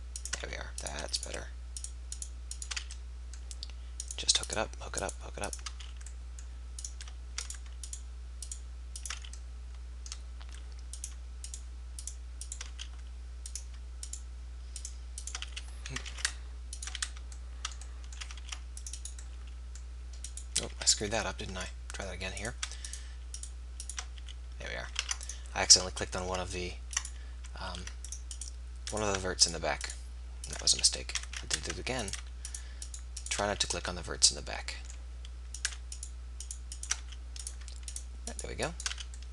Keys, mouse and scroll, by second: 0.4 f, 2.8 f, 5.7 f, 9.1 f, 12.8 f, 15.4 f, 16.0 ctrl+z, 17.0 f, 17.6 click, 18.4 ctrl+r, 20.3 click, 20.8-21.2 ctrl+z, 24.3 f, 25.1 ctrl+r, 27.7 ctrl+r, 30.6 f, 31.2 ctrl+z, 33.5 f, 34.7 click, 35.6-37.4 drag, 37.1 f, 38.9 f.